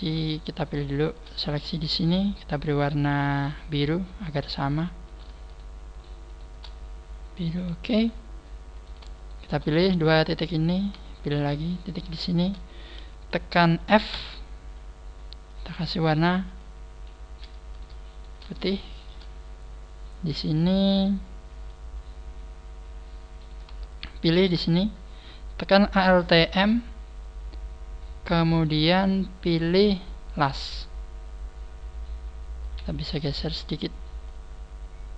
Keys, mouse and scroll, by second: 0.3 shift+right click, 0.7 shift+right click, 1.4-1.9 scroll up 4, 2.3 click, 5.1 right click, 5.5 shift+right click, 5.9 shift+right click, 7.9 a, 8.7 right click, 9.1 shift+right click, 11.2 shift+right click, 14.1 f, 15.5 click, 17.7 right click, 18.1 shift+right click, 18.9 shift+right click, 19.9 scroll up 4, 20.5 shift+middle click, 20.9 shift+middle click, 22.1 scroll up 2, 22.7 scroll up 1, 23.3 right click, 23.3-23.7 scroll up 1, 23.9 shift+right click, 33.3 middle click, 34.3 click.